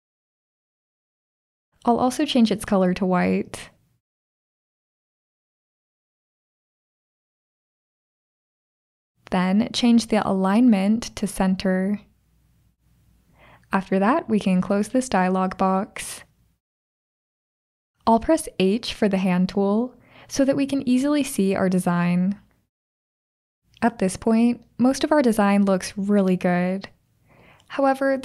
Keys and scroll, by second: 0.0-0.2 typing, 18.6 h.